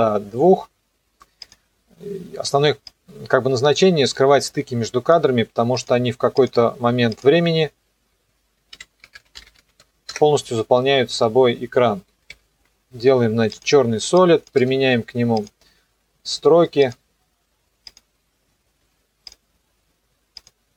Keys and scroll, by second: 8.5-10.1 typing, 12.3 ctrl+shift+y, 14.5 Return, 18.8 Escape.